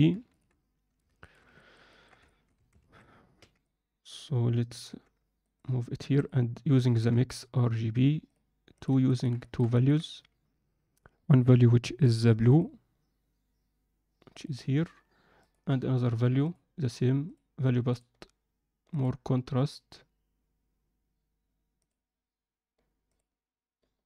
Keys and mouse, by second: 1.2 shift+middle click, 1.6 ctrl+alt+middle click, 1.8 ctrl+middle click, 2.4 middle click, 9.0 ctrl+middle click, 9.5 alt+shift+middle click, 12.5-13.3 drag, 15.4-15.9 drag, 17.9 drag, 23.0 drag.